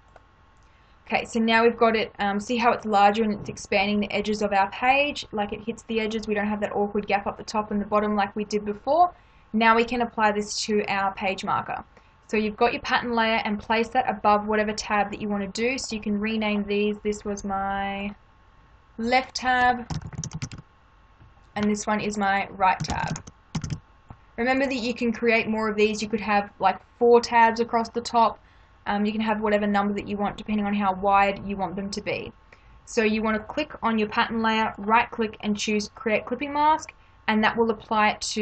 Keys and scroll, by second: 19.6-21.0 typing, 22.5-24.0 typing.